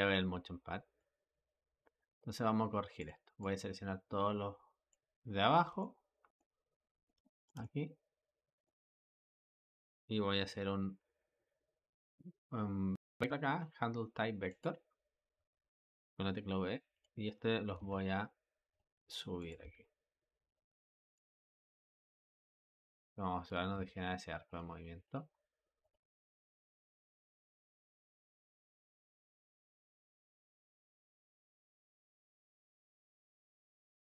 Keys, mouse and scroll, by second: 16.8 click, 17.7 g, 19.2 click, 19.5 g, 20.9-21.7 drag, 21.7 g, 23.3 click, 23.6 g, 24.9-26.5 drag, 26.5 g, 28.5 click, 28.8 g, 30.9 g, 33.5 click.